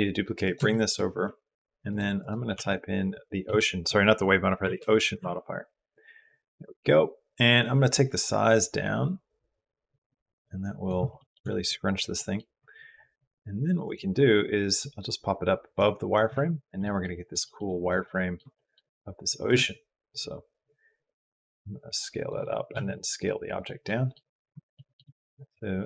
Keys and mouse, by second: 0.5 shift+click, 1.7 click, 2.1-4.9 drag, 8.5-10.7 drag, 11.0 shift+middle click, 11.3 middle click, 14.6-15.6 drag, 16.6 middle click, 17.3 shift+middle click, 17.9 middle click, 17.9 click, 18.4 click, 19.3 click, 20.5-22.2 drag, 22.6 s, 23.7 click, 24.5 shift+click.